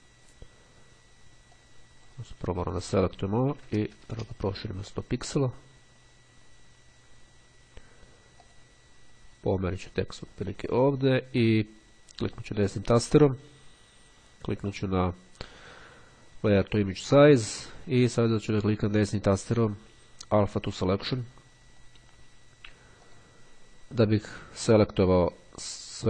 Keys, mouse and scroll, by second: 1.7 click, 3.0 click, 3.4 KP_1, 3.6 KP_0, 3.8 KP_Enter, 8.6 click, 9.8-11.8 drag, 12.5-17.3 drag, 18.4-19.5 right drag, 20.8 click, 23.2 click.